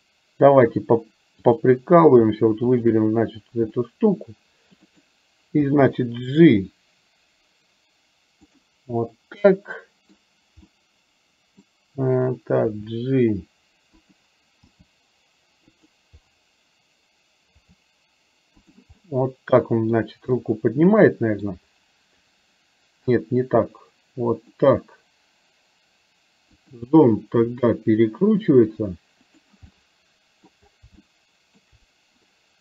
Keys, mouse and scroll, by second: 1.7 click, 2.7 shift+click, 3.7-5.1 middle drag, 5.7 g, 9.1-10.2 middle drag, 9.1-10.2 scroll up 1, 10.7-11.7 middle drag, 10.7-11.1 scroll up 1, 12.8 r, 14.8 g, 17.6 r, 18.9-19.9 middle drag, 20.4-21.6 middle drag, 23.2 r, 26.6 click, 27.6 r, 29.8 middle click, 31.1 shift+middle click.